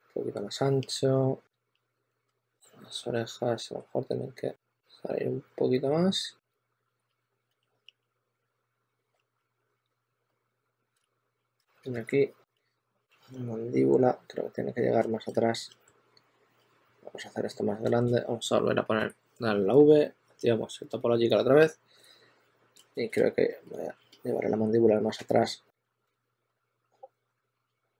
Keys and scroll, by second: 2.5 2, 6.2-10.2 typing, 10.8 super+z, 11.8 shift+f, 12.5 s, 15.5 2, 18.8 v, 23.4 2, 25.1 2, 27.3 s.